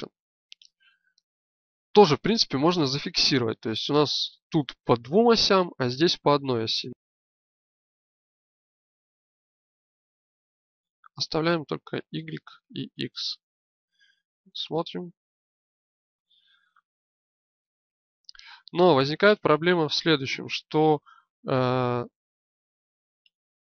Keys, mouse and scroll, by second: 14.7 g.